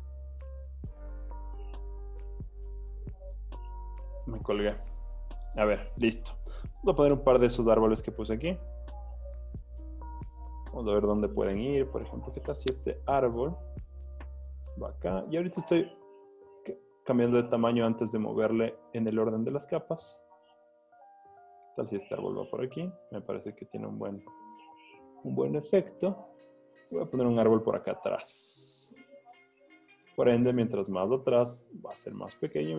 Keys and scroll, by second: 8.4 z, 9.0 v, 12.8 super+y, 15.8 super+t, 23.3 Return, 24.3 v, 27.7 super+t.